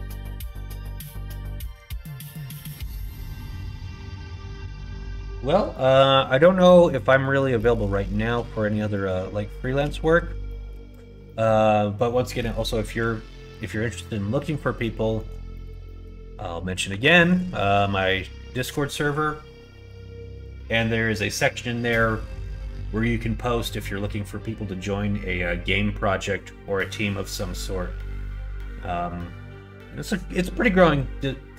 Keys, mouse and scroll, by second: 1.5 middle click, 1.9 middle click, 2.3 middle click, 2.7 middle click, 3.1 middle click, 3.6 shift+middle click, 4.4 middle click, 5.6 middle click, 6.1 middle click, 6.6 middle click, 7.1 middle click, 7.5 middle click, 8.0 shift+middle click, 8.4 middle click, 8.8 middle click, 9.5 shift+middle click, 9.9 middle click, 10.4 shift+middle click, 11.1 middle click, 14.2 middle click, 15.1 middle click, 15.4 shift+middle click, 15.7 middle click, 16.8 Tab, 17.2 click, 17.5 middle click.